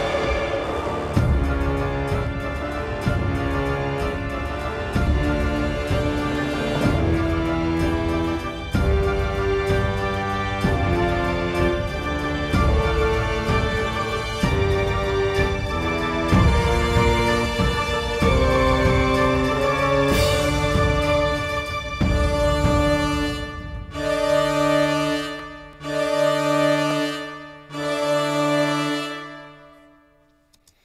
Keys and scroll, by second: 30.5 space.